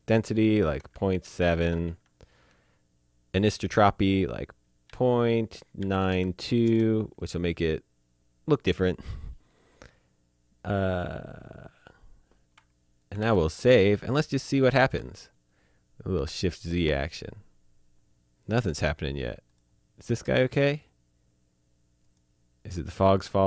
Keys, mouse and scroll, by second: 1.1 KP_Decimal, 1.2 KP_7, 1.8 Tab, 4.8 KP_Decimal, 5.8 KP_9, 6.0 KP_2, 6.6 KP_Enter, 13.0 click, 13.2 ctrl+s, 13.5 click, 14.7 shift+z, 17.9 z, 19.4 click, 22.0 click, 22.9 click.